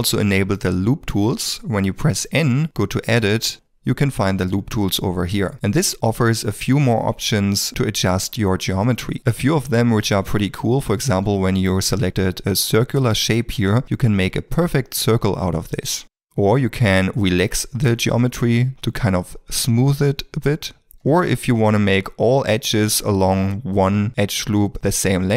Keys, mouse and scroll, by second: 1.2 n, 3.5 middle click, 9.0 alt+l, 10.0 middle click, 20.9 ctrl+z, 22.3 ctrl+l.